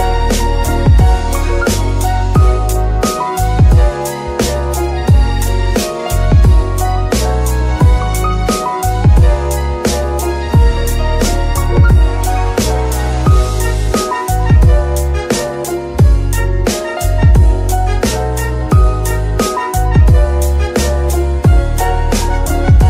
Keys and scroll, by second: 6.6 ctrl+c, 10.4 BackSpace, 11.2 Return, 13.6 Tab, 14.5 Escape, 14.8 Tab, 15.5 KP_Divide.